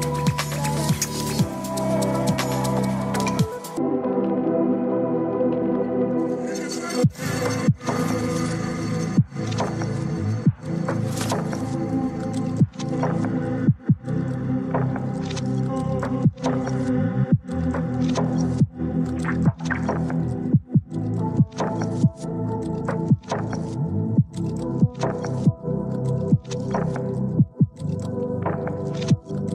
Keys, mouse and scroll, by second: 0.4-1.8 s, 1.8 click, 1.8 s, 2.0 s, 2.1 s, 3.7-5.7 drag, 6.8 g, 9.3 click, 10.1 click, 11.5 g, 13.0 click, 14.1-15.6 drag, 16.2 g, 19.9 click, 20.6 click, 22.2 g, 27.5 click, 29.4 click.